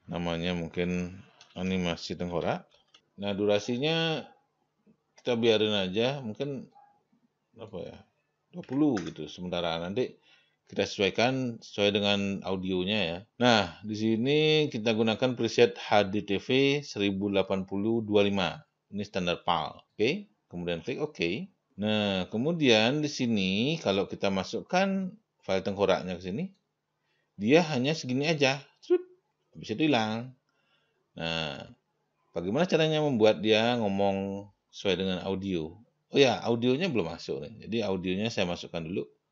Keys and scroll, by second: 2.0-3.4 typing, 9.1 2, 9.4 0.